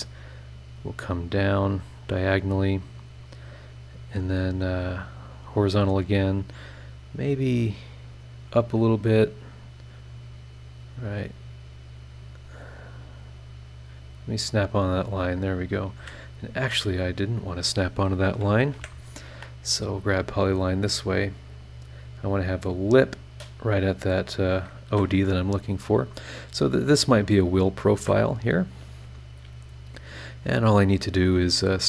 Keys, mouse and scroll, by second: 2.2 click, 5.3 click, 8.4 click, 9.6 click, 14.5 click, 14.9 scroll down 2, 15.6 scroll up 2, 16.0 Escape, 16.7 Escape, 17.4 click, 18.7 Delete, 20.0 click, 21.8 click, 22.5 click, 24.3 click, 24.9 Escape, 27.9 Escape, 28.4 scroll up 1, 30.8-31.8 drag.